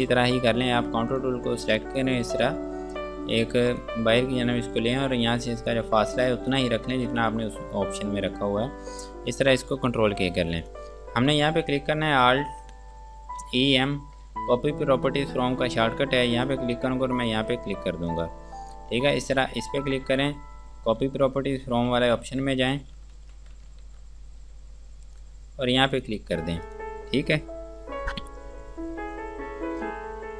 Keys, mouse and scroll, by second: 4.5 scroll up 1, 5.9 click, 7.8 ctrl+space, 8.1 scroll down 1, 9.9 k, 10.8 click, 13.0-14.2 typing, 16.7 click, 19.8-20.2 scroll down 1, 21.3 alt+e, 21.9-22.6 typing, 23.4 ctrl+z, 24.1 alt+e, 24.4-25.1 typing, 25.4 click.